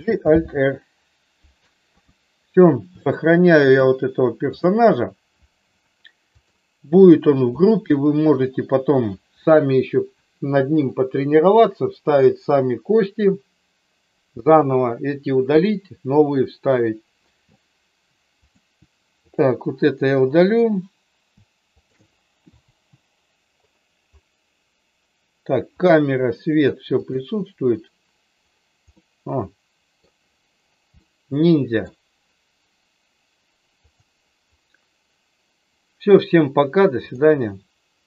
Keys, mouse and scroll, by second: 0.0 alt+g, 0.5 alt+r, 1.8 KP_1, 2.9 shift+middle click, 6.3 click, 7.6 shift+middle click, 18.5 click, 19.2 click, 21.7 shift+click, 22.6 Delete, 27.2 click, 28.8-30.0 middle drag, 31.0 middle click, 37.0 click.